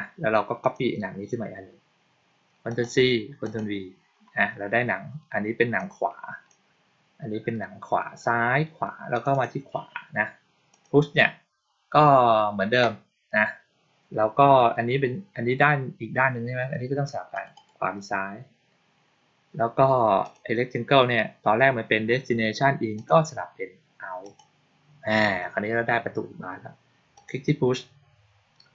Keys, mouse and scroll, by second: 0.5 click, 2.5 click, 3.3 click, 5.6 click, 9.0 click, 9.2 click, 10.6 click, 17.2 click, 17.4 click, 20.1 click, 22.8 click, 24.1 click, 27.0 click.